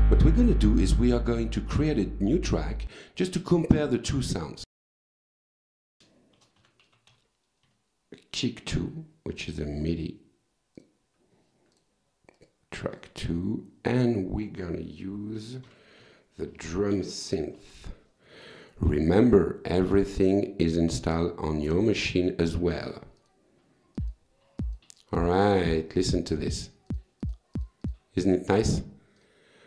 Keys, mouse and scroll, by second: 2.2 click, 3.6 click, 4.7 click, 6.1-7.6 typing, 9.4 click, 10.8 click, 11.8 click, 12.4 right click, 13.0 click, 15.2-17.4 typing, 19.2 click, 23.2 click, 24.0 click, 24.6 click, 25.2 click, 25.7 click, 26.1 click, 26.5 click, 26.9 click, 27.2 click, 29.2 click.